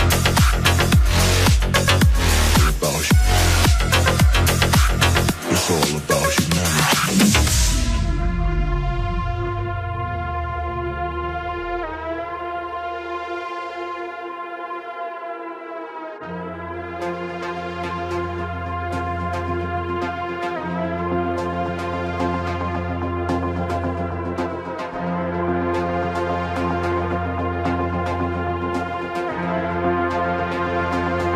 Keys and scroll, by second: 12.2 Tab.